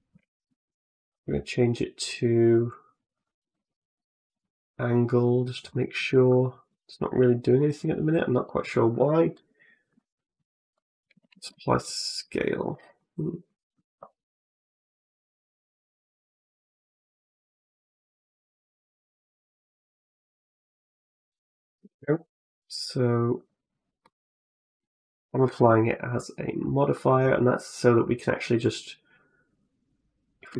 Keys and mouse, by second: 1.0 click, 2.0 click, 3.0 click, 3.3 click, 5.5 middle click, 5.9 middle click, 10.6 click, 11.1 ctrl+a, 12.4 click, 12.8 middle click, 15.1-20.5 drag, 22.5 click, 23.8 middle click, 25.4 w, 28.5-30.3 drag.